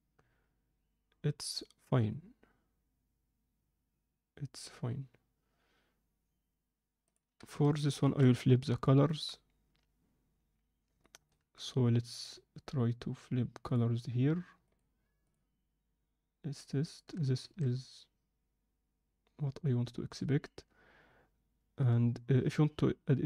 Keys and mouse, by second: 8.1 shift+F3, 8.8 shift+middle click, 11.0 shift+middle click, 12.6-13.7 drag, 14.7-15.6 drag, 17.4 alt+a.